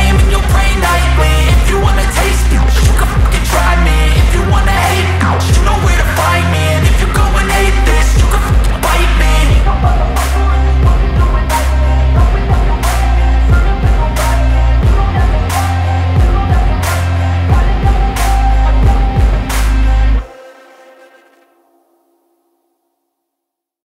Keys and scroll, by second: 0.0 Down, 2.9 ctrl+c, 3.0 ctrl+v, 6.6 Left, 6.8 Right, 6.9 Up, 19.0 Left, 19.4 Up.